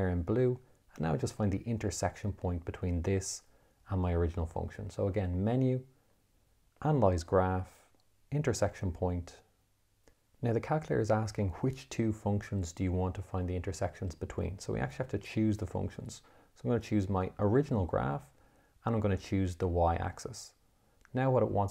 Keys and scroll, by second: 5.7 Menu, 7.4 6, 9.2 4.